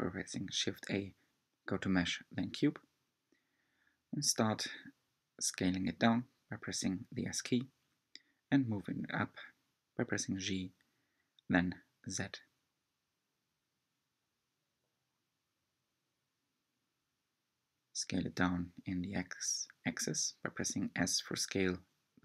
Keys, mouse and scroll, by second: 0.2 click, 0.4-1.0 scroll down 3, 1.0-3.1 middle drag, 3.1 shift+a, 6.1 s, 9.9-11.7 middle drag, 11.7 g, 13.6-14.7 middle drag, 14.7 scroll up 1, 15.5 g, 21.3 s.